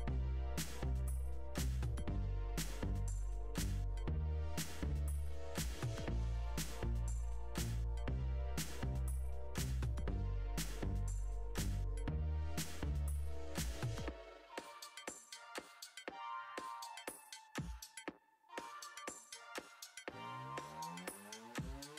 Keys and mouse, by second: 0.6 ctrl+KP_3, 1.9-2.9 drag, 3.7 click, 5.2 g, 6.6 click, 6.8 g, 8.1 e, 9.4-10.6 drag, 10.6 1, 11.1 click, 11.8 shift+click, 12.0 g, 13.0 click, 13.2 shift+click, 13.5 g, 14.2 2, 14.3 click, 14.5 g, 15.5 click, 15.8 1, 16.2 g, 17.2 Tab, 20.2 middle click.